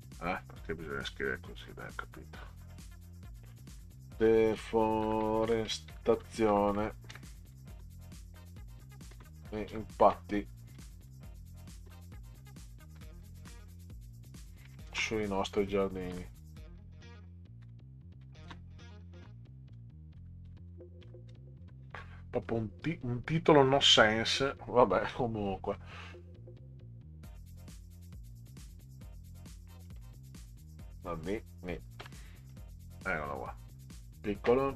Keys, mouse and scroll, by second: 3.5-13.4 typing, 14.4-22.1 typing, 24.0 click, 26.1 Delete, 28.7-29.8 drag, 32.0 i.